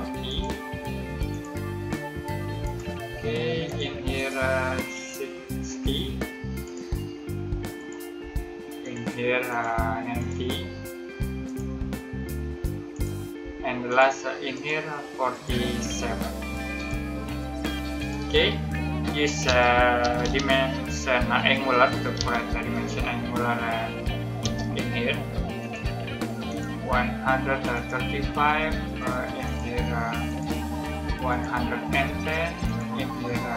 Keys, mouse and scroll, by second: 3.0 space, 3.6 click, 8.0 click, 8.1 space, 8.7 click, 13.3 space, 13.8 click, 19.4-20.6 typing, 22.1 typing, 24.3 space, 25.5 click, 28.4 space, 29.3 click, 31.9 space, 32.6 click.